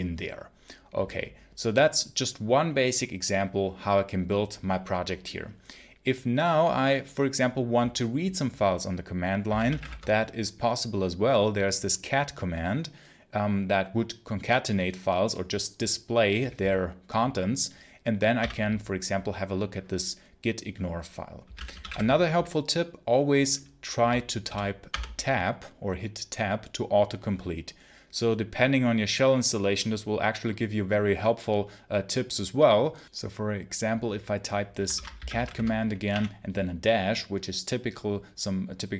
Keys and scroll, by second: 9.3 c, 9.6 t, 9.7 space, 18.2 ., 21.1-22.2 typing, 24.3 i, 24.8 Tab, 34.8-36.0 typing.